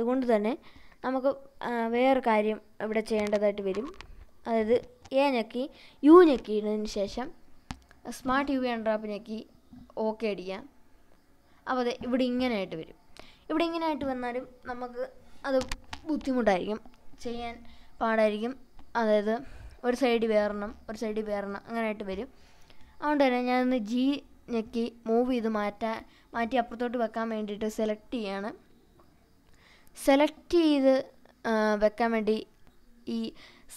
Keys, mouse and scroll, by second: 0.7 shift+middle click, 2.0-2.3 scroll up 3, 3.1 shift+middle click, 5.1 u, 11.1-12.4 scroll down 6, 13.3 scroll down 1, 13.5 shift+middle click, 14.1-14.5 scroll up 4, 14.7 scroll down 2, 15.3 scroll up 1, 15.9 scroll down 1, 16.2 scroll up 2, 17.6-18.0 scroll down 2, 18.5 scroll up 1, 19.2 scroll down 1, 19.9-22.4 drag, 24.1-24.9 scroll up 3, 27.7-28.6 ctrl+drag, 29.8-30.7 ctrl+drag, 32.1-33.2 shift+drag.